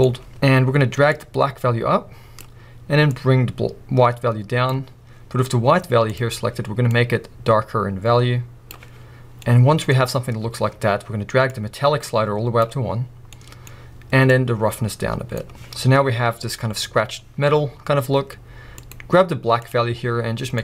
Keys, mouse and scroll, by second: 1.2-7.0 drag, 9.7-11.6 middle drag, 11.6-13.5 drag, 13.5-14.4 middle drag, 14.4-19.8 drag.